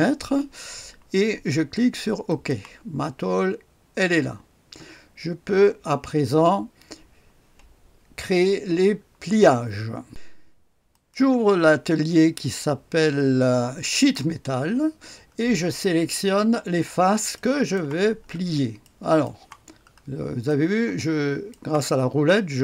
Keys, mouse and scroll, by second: 2.2 click, 3.1 scroll up 1, 3.9-4.8 scroll down 1, 4.8-9.5 scroll up 1, 10.0 click, 10.8 click, 13.8 click, 15.3-16.0 scroll up 1, 16.0-17.7 scroll up 1, 17.3 right click, 18.1-19.2 scroll up 2, 19.7-21.5 scroll up 1, 22.0-22.6 drag.